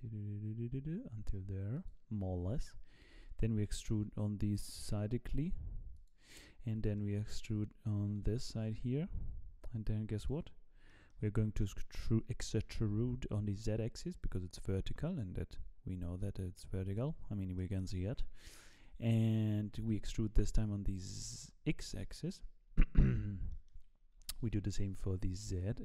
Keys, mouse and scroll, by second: 4.7 e, 6.6-6.9 scroll up 3, 6.9 shift+middle click, 8.2 e, 10.4-11.6 scroll down 5, 10.9 shift+middle click, 11.6 shift+middle click, 12.5 e, 17.2-17.5 scroll up 3, 17.5 shift+middle click, 18.0-18.4 scroll up 3, 18.4 shift+middle click, 19.6 e, 22.5 scroll down 3, 22.7 shift+middle click, 23.2 scroll down 2, 23.5 shift+middle click, 24.1 e.